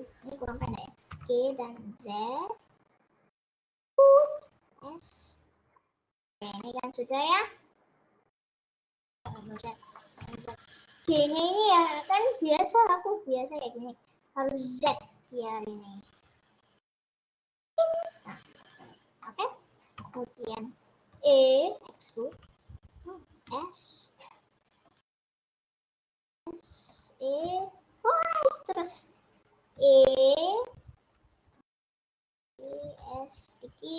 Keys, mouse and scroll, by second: 1.5 g, 5.0 s, 6.7-9.5 middle drag, 9.5 ctrl+z, 10.1 middle click, 10.5 ctrl+z, 11.1 g, 18.7 click, 19.1 scroll down 1, 19.3 middle click, 19.8-20.3 scroll up 2, 20.3 middle click, 21.3 e, 22.8 z, 23.4 s, 25.2 s, 27.5 s, 30.0 e, 33.1 5.